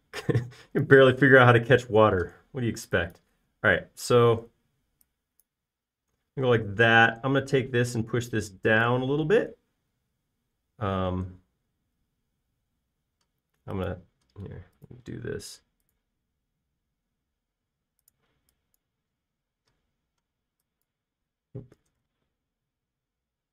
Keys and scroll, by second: 3.1 e, 8.0 p, 10.4 typing, 11.8 typing, 16.3 |, 19.3 e, 23.0 l.